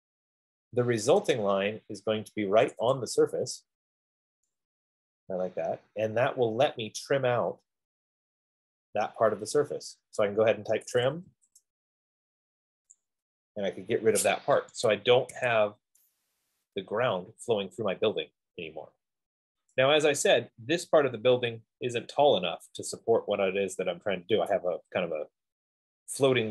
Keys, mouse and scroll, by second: 1.4 click, 1.9 click, 3.0 click, 3.3 click, 4.1 middle click, 4.2 middle click, 10.4 right click, 10.6 F15, 10.9-11.5 typing, 11.6 Return, 13.4 click, 14.2 typing, 14.9 Escape, 15.8 Escape, 19.9 right click, 21.6-22.2 scroll.